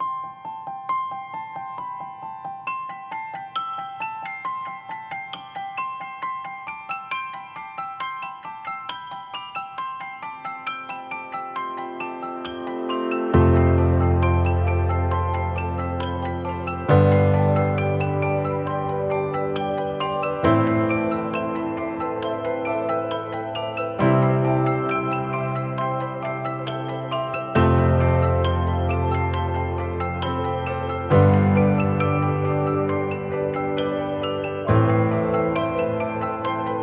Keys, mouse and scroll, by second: 0.0 typing, 2.0 typing, 29.5 typing.